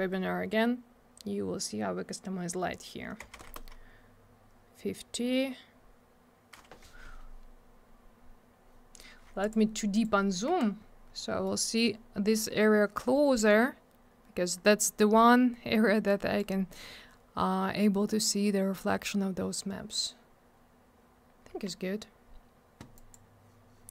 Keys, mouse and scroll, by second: 3.2 5, 3.4 Return, 7.7-8.5 scroll up 1, 8.5-9.4 scroll down 1, 9.4 click, 9.9 right click, 10.8 scroll up 1, 11.4 middle click, 11.9-12.4 scroll up 1, 14.6-15.5 scroll down 1, 19.4-19.8 scroll down 1, 21.2 scroll down 1, 22.9 click, 23.1 click, 23.5-23.9 scroll up 1.